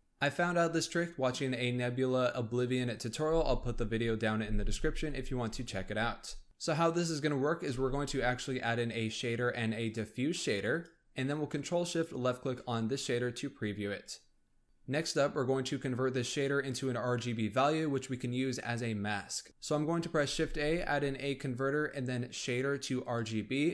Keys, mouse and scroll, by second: 6.4-6.8 middle drag, 6.8-7.7 scroll up 1, 7.7 shift+a, 20.3 shift+a.